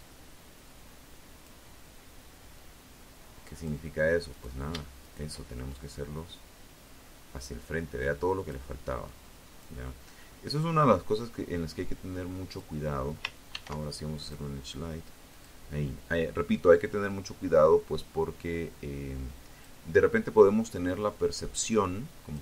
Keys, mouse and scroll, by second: 0.7-2.0 drag, 2.5 right click, 3.1 shift+right click, 3.9-6.8 shift+drag, 7.2 click, 8.2-10.9 drag, 11.7 ctrl+e, 12.4 click, 13.5 click, 14.7-18.0 drag, 19.1-20.7 drag, 21.4 ctrl+e, 22.1 click.